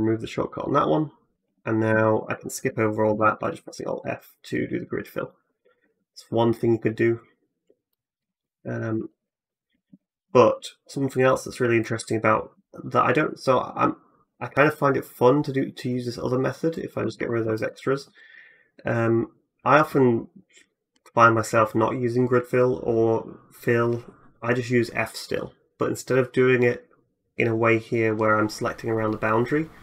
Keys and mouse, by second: 1.3 ctrl+z, 1.7 ctrl+z, 2.0 click, 2.9 alt+f, 3.0-8.1 drag, 8.4 click, 8.9-10.9 shift+drag, 9.7 ctrl+z, 10.9 middle click, 11.4 shift+click, 11.6 shift+middle click, 11.7-18.9 shift+drag, 12.4 x, 14.1 x, 16.8 a, 17.0 a, 18.9-20.1 middle drag, 20.1-29.8 drag.